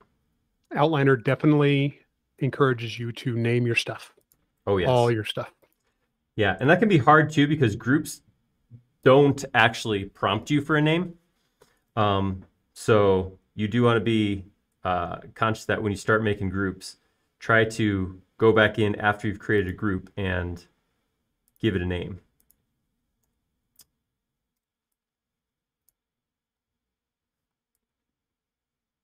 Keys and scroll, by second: 4.7 l, 6.9-7.7 typing, 9.6 space, 13.4 c, 23.3-25.5 typing, 27.5-28.4 typing.